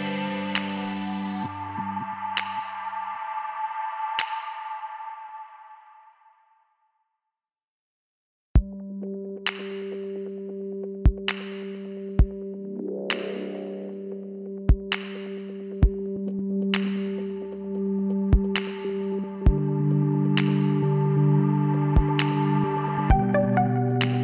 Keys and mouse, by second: 0.0-1.9 drag, 1.4 ctrl+z, 2.1 ctrl+z, 3.5-6.4 drag, 5.4 g, 7.4 a, 7.6 a, 8.3 w, 13.5-14.7 middle drag, 14.0 KP_1, 14.3 z, 15.0 b, 15.3-19.7 drag, 16.5 w, 22.0-23.8 drag, 22.9 s.